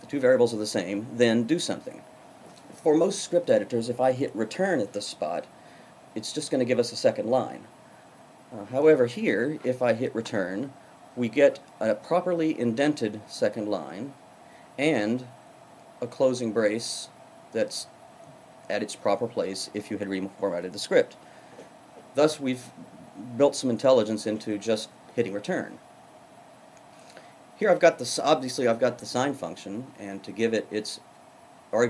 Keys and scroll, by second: 10.2 Return.